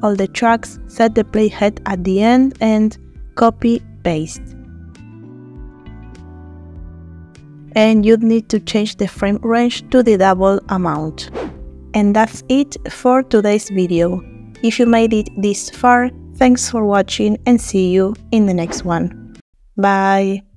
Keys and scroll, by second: 3.7 ctrl+c, 4.7 ctrl+v, 9.8 KP_Multiply, 10.0 Return.